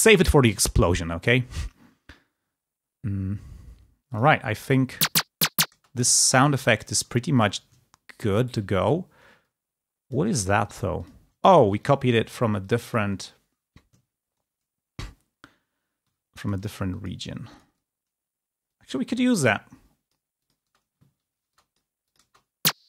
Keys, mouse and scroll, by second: 4.1 click, 4.8 space, 6.2 g, 7.2 ctrl+click, 9.8 ctrl+click, 10.9-11.9 drag, 12.7 click, 14.8-15.7 ctrl+scroll down 2, 16.8 click, 18.6-20.6 drag, 20.5 space, 21.5 ctrl+click.